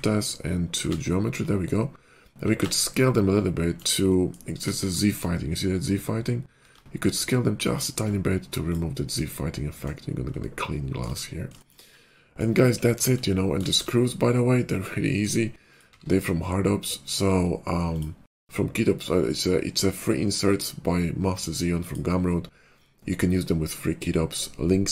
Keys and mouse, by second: 1.9-3.9 drag, 2.3 s, 3.9 middle click, 4.5 KP_5, 6.5 s, 7.9-9.2 middle drag, 10.4-15.6 shift+middle drag, 15.6 click, 15.7 middle click, 15.9 q.